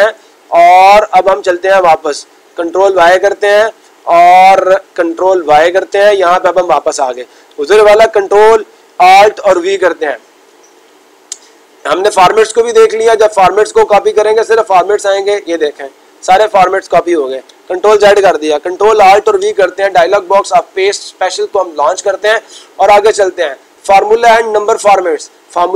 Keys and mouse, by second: 13.1-14.1 drag, 14.4-15.5 drag.